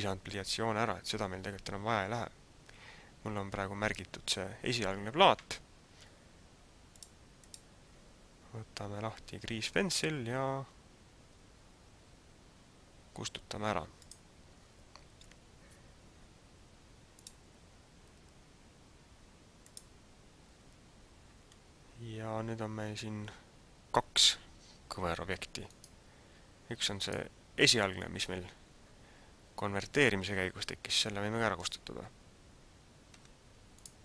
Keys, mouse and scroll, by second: 6.9 click, 14.1 click, 17.3 click, 21.6-22.6 scroll up 2, 22.6-23.2 scroll up 1, 25.6 right click, 27.2 right click, 33.3 x.